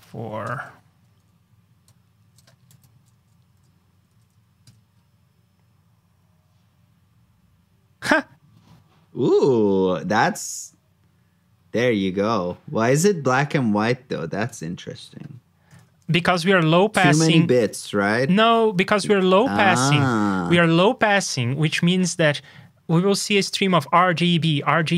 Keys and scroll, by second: 2.6 super+c, 3.1 super+s, 16.0 super+j.